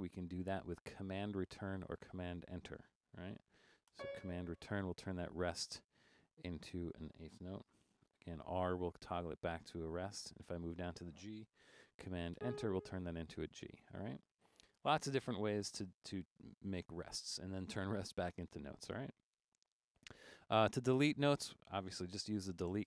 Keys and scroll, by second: 4.0 super+Return, 8.2 r, 9.0 Down, 9.2 Down, 9.3 Down, 22.1-22.8 typing.